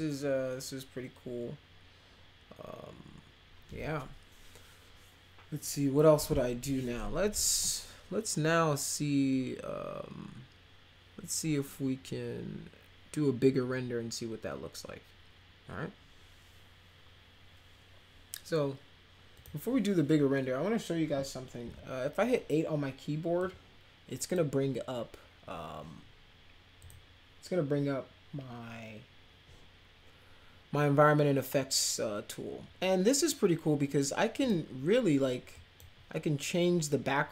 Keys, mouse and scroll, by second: 19.3 click, 23.4-24.3 drag, 26.8 click, 34.4 click, 35.5 click.